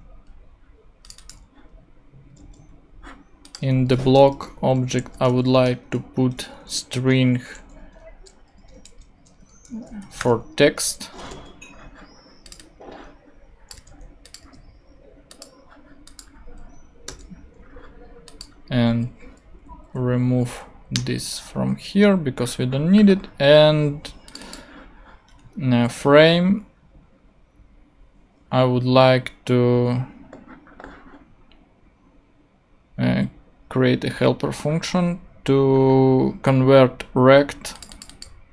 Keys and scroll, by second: 2.4 super+c, 4.0 Return, 4.8 super+., 4.9-6.4 typing, 6.9 shift+Return, 7.5 Return, 7.6-11.3 typing, 13.8 super+c, 14.4 super+v, 17.1 BackSpace, 19.1 super+Left, 19.9 shift+super+Left, 20.1 shift+super+Down, 20.9 shift+Return.